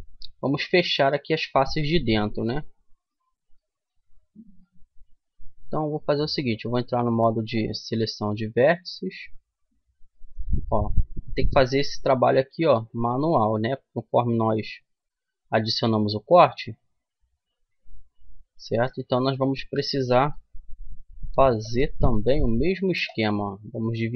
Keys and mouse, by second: 0.3-5.9 middle drag, 5.9-7.8 right drag, 8.5 click, 9.4-10.9 middle drag, 10.9 click, 13.3 click, 13.3 f, 14.5-15.6 middle drag, 19.9 w.